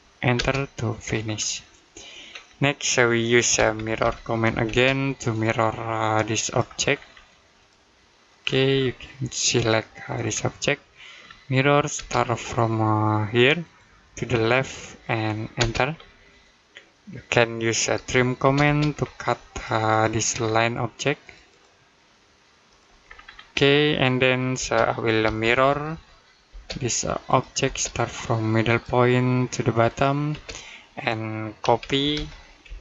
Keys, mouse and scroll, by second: 0.2 space, 1.0-1.4 scroll down 1, 1.4 middle click, 2.1-2.6 scroll up 1, 2.6 middle click, 3.4 typing, 4.5 space, 5.1 click, 6.7 scroll up 1, 7.4 click, 8.5 scroll up 1, 9.4 click, 9.9-10.5 scroll down 1, 10.5 middle click, 11.1-11.8 scroll down 1, 11.8 space, 13.4 click, 15.4 space, 15.8-16.2 scroll down 1, 16.2 middle click, 17.7-18.2 typing, 18.7-19.3 scroll up 1, 19.3 click, 20.2-21.1 scroll up 1, 21.1 click, 22.9-23.8 scroll down 1, 23.8 middle click, 24.4-25.1 typing, 26.3 space, 26.6 click, 27.5 space, 28.5 click, 30.1 space, 31.4 typing, 32.5 space.